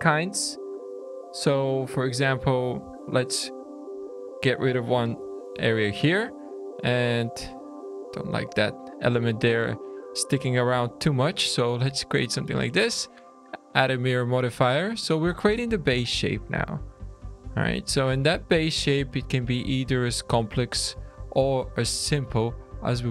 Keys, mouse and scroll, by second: 0.3 Tab, 1.5 1, 2.4 ctrl+z, 3.0 Tab, 3.0 ctrl+r, 3.0 scroll up 2, 3.8 3, 4.0 click, 4.9 x, 5.4 Tab, 6.2 Tab, 6.7 click, 7.1 click, 8.2 2, 8.6 click, 9.9 click, 12.4 click, 13.0 click, 15.9 scroll down 3, 16.6 shift+middle click, 17.3 Tab, 17.6-18.0 scroll up 2, 18.0 Tab, 18.4 middle click, 19.0 alt+a, 19.6 2, 20.1 1, 20.6 click, 22.0 ctrl+r.